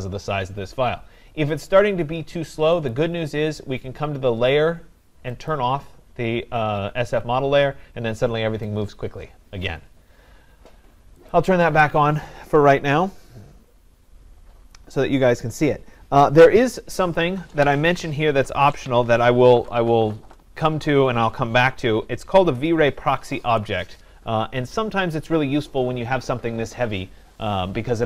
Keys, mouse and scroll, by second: 2.9 click, 5.5 click, 8.6 right click, 11.2 click, 15.0-16.5 drag.